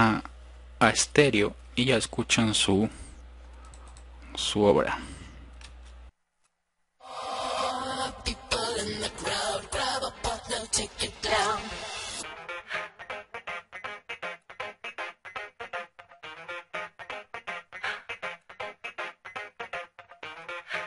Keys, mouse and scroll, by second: 3.1 F1.